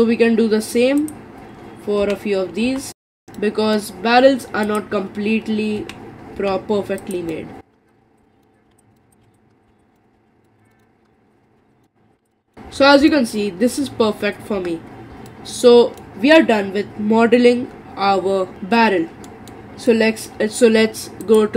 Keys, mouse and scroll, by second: 1.0 click, 2.0 g, 3.1-4.7 middle drag, 4.7 click, 5.8 g, 7.3 middle click, 7.9 click, 8.0-10.1 typing, 8.3 middle click, 8.6 click, 8.8 middle click, 9.1 click, 9.4 middle click, 9.6 click, 9.8 middle click, 9.9 scroll down 5, 10.0 middle click, 10.7 middle click, 11.1 scroll up 3, 11.2 middle click, 11.3 click, 11.6 g, 11.7 middle click, 12.1 click, 12.2 g, 12.3 middle click, 12.7-13.1 scroll down 5, 13.1-14.6 middle drag, 14.6 Tab, 15.3-18.4 middle drag, 19.8-21.3 middle drag, 21.3 click.